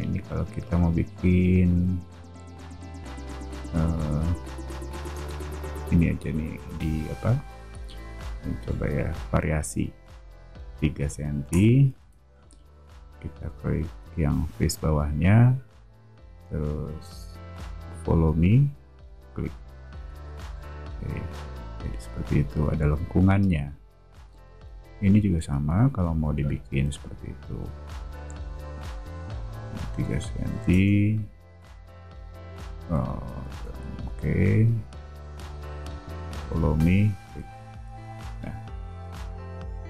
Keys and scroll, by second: 3.2 space, 4.4 a, 11.2 3, 11.5 Return, 11.9 space, 12.8 o, 13.9 space, 19.9 space, 20.2 o, 26.9 a, 30.2 3, 30.6 Return, 31.7 o, 33.4 space, 37.5 space, 38.4 o.